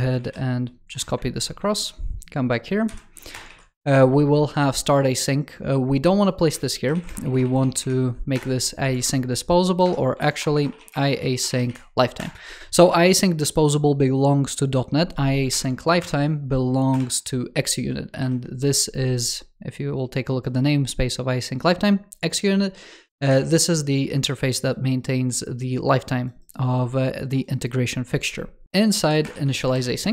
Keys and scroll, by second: 0.0 super+c, 3.3 super+v, 8.8 super+Return, 10.0 alt+BackSpace, 15.4 super+Return, 23.1 super+w, 28.6 super+x, 29.2 super+v, 29.6 super+Left.